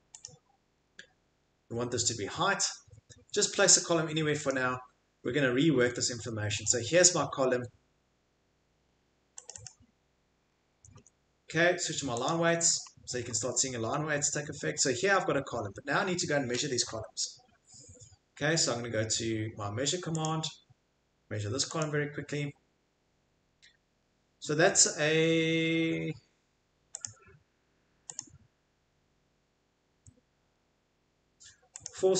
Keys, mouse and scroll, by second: 3.0 middle click, 3.0 middle click, 3.4 middle click, 4.5 click, 5.7 Escape, 6.0 Escape, 6.2 Escape, 10.7 Escape, 11.0 Escape, 12.9 middle click, 12.9 middle click, 13.2 middle click, 13.3 Escape, 13.9 middle click, 14.3 Escape, 14.8 click, 15.6 Escape, 20.2 click, 24.0 middle click, 24.7 Escape, 24.7 middle click, 27.0 click, 27.0 scroll, 28.2 click, 31.8 click.